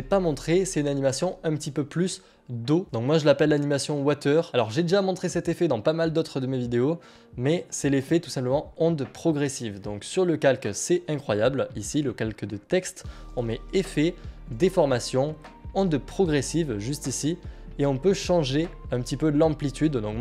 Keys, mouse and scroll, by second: 4.5 click, 10.8 click, 16.8 click, 19.3 click.